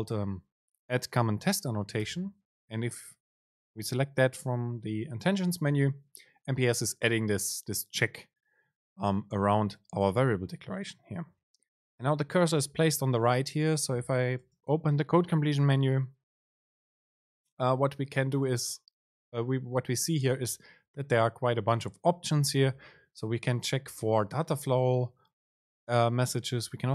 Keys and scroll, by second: 14.7 super+space.